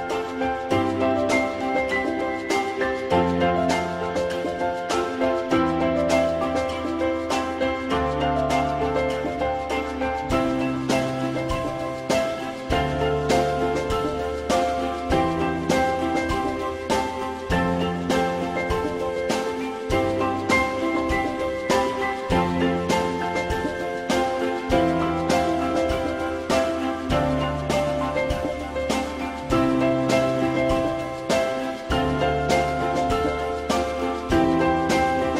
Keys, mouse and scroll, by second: 0.9 alt+middle click, 4.2 click, 8.4 alt+middle click, 17.4-18.1 typing.